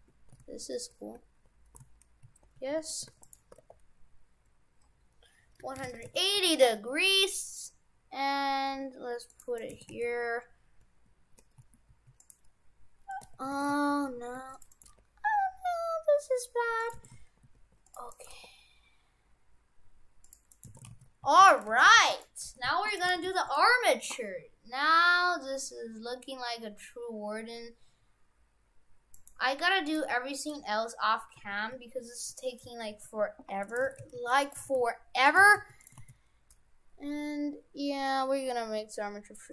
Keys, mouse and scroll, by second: 3.1 shift+d, 3.5 r, 6.4 g, 9.2 g, 9.6 right click, 9.8 shift+f, 13.6 shift+f, 14.8 right click, 14.8 g, 17.0 shift+f, 18.2 right click, 18.3 g, 20.6 right click, 20.7 shift+f, 21.8 shift+f, 22.6 shift+f, 23.2 shift+f, 29.2 right click, 31.5 shift+f, 33.9 shift+f, 34.7 shift+f, 35.4 shift+f, 36.0 shift+a.